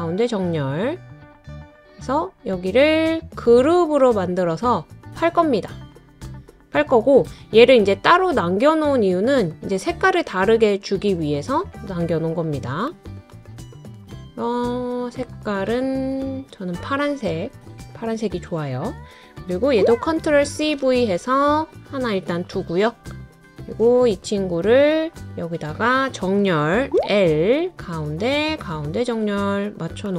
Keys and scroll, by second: 20.2 super+c, 20.6 super+v.